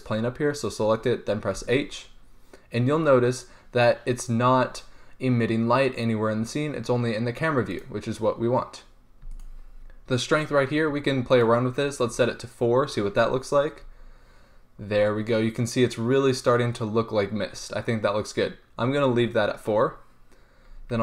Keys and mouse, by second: 2.3 h, 8.0 right click, 8.8-9.5 drag, 9.8-14.1 right drag.